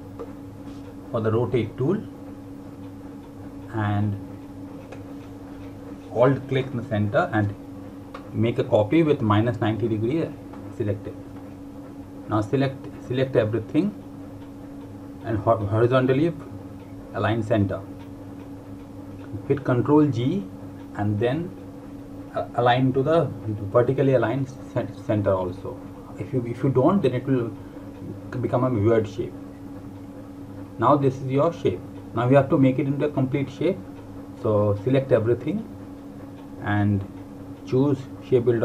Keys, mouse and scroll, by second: 1.6 r, 5.7 alt+Num_Lock, 6.0 click, 8.4 click, 11.8 click, 17.0 click, 20.9 ctrl+Num_Lock, 22.0 ctrl+g, 24.2 click, 31.6 click.